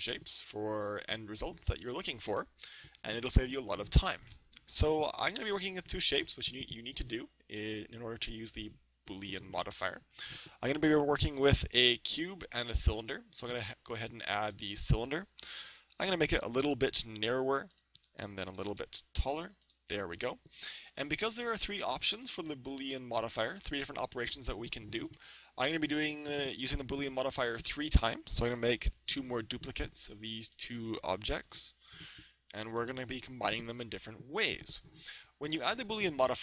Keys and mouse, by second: 9.6-11.4 middle drag, 12.1 shift+a, 15.4 s, 17.8-19.6 drag, 18.5 s, 19.8-21.5 drag, 20.9 KP_1, 25.0 right click, 26.1-27.9 drag, 28.5 shift+d, 30.7-32.4 drag, 31.4 shift+d, 32.9-34.7 drag, 34.5 right click.